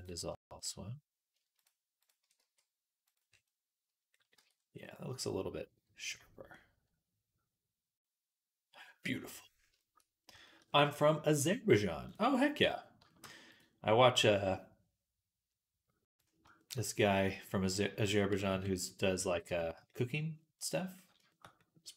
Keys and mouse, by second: 0.1 shift+middle click, 0.4 shift+middle click, 2.2 x, 4.2 Tab, 5.6 right click, 6.1-9.6 drag, 9.6-12.4 shift+right drag, 12.5 Tab, 12.5-19.2 right drag, 13.3 click, 18.3 KP_3, 19.2 shift+middle click, 19.4-20.8 right drag, 20.8 shift+middle click, 21.1-21.9 right drag.